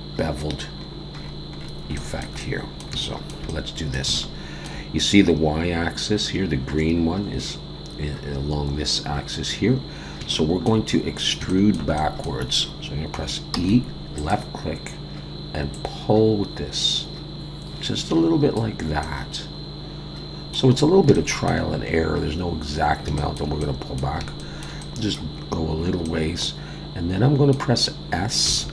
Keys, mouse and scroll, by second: 0.6-1.9 scroll down 15, 1.9 shift+middle click, 3.0 shift+middle click, 3.5 middle click, 4.1 shift+middle click, 9.6-10.2 scroll up 1, 10.2 scroll up 2, 10.3 shift+middle click, 11.1-11.4 scroll down 1, 11.5 shift+middle click, 12.0 middle click, 13.5 e, 15.7 click, 19.0 middle click, 20.8-21.1 scroll up 2, 21.1 shift+middle click, 22.3-23.1 scroll down 5, 23.2 shift+middle click, 23.6 middle click, 24.4 shift+middle click, 24.8 middle click, 25.4-25.9 scroll up 2, 26.0 middle click, 28.5 s.